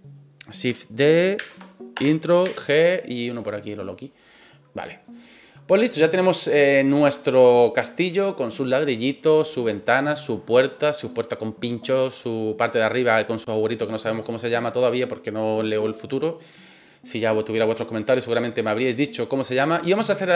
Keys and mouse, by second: 0.0 right click, 1.4 shift+d, 1.9 Return, 2.4 g, 3.7 click, 4.1 right click, 4.4-4.8 middle drag, 5.0-5.7 middle drag, 17.8-18.2 shift+middle drag, 18.4-18.7 middle drag.